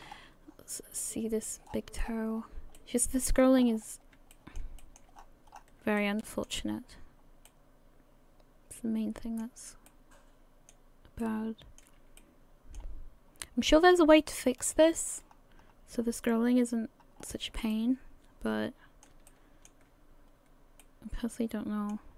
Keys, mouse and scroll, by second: 0.1-0.7 scroll up 9, 1.0 middle click, 1.7-2.8 scroll down 12, 2.8 middle click, 3.6-4.1 scroll up 7, 4.3 shift+middle click, 4.8 middle click, 5.2-6.2 scroll up 9, 6.0 shift+middle click, 6.7-7.5 scroll up 3, 7.5 middle click, 9.9 middle click, 11.2 middle click, 12.2 shift+middle click, 12.2 shift+middle click, 14.6 click, 15.6-17.2 scroll up 2, 17.2-17.6 scroll down 6, 17.7 middle click, 19.3 shift+middle click, 20.0-20.8 scroll up 4, 20.8 middle click.